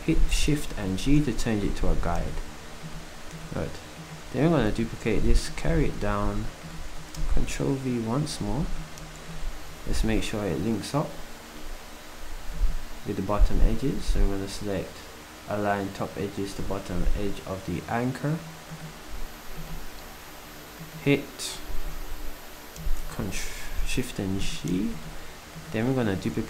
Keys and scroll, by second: 0.7 shift+g, 4.6 d, 7.2 v, 23.1 shift+g.